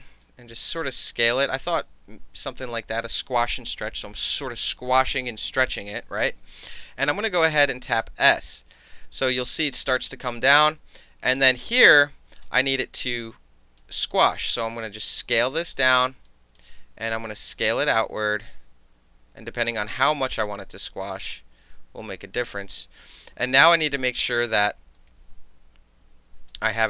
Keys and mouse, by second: 0.2-1.2 drag, 1.5-3.0 alt+drag, 8.0 s, 8.5-11.9 drag, 12.7 alt+click, 14.7-16.1 drag, 16.3 alt+drag, 17.2-19.9 drag, 20.1-20.5 alt+drag, 21.1-22.1 drag, 22.4 alt+click, 23.5 alt+space, 25.0 alt+space, 26.5 alt+click.